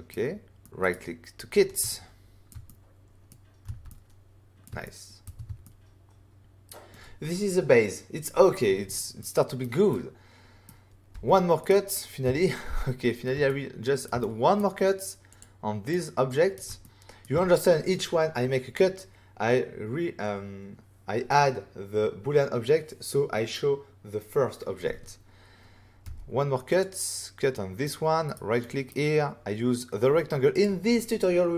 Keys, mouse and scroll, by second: 0.6 middle click, 0.8 right click, 1.8 ctrl+middle click, 2.4 middle click, 2.6 middle click, 3.8 middle click, 4.8 shift+middle click, 5.6 middle click, 9.1 middle click, 9.9 middle click, 11.1 f, 11.6 right click, 12.2 right click, 12.2 typing, 13.1 scroll down 1, 13.4 ctrl+middle click, 14.1 middle click, 15.3 click, 15.9 middle click, 16.8 ctrl+middle click, 26.0 f, 26.7 click, 27.5 middle click, 28.2 right click, 28.5 middle click, 30.5 click.